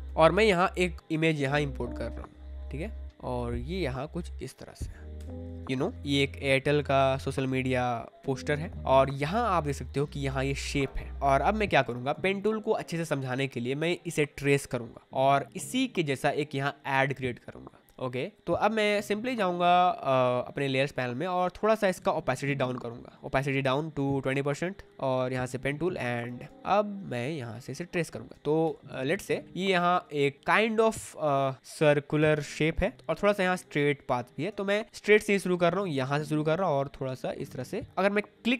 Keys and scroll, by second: 0.0 v, 1.0 Escape, 5.1 Return, 5.9 ctrl+t, 6.0 Escape, 6.9 ctrl+t, 8.6 Return, 8.8 space, 11.1 space, 25.8 space, 28.6 ctrl+z, 29.4 space, 33.4 space.